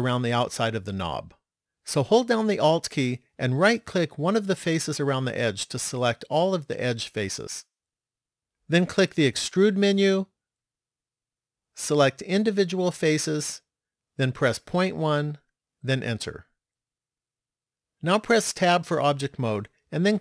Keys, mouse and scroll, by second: 4.4 alt+right click, 9.5 click, 18.7 Tab.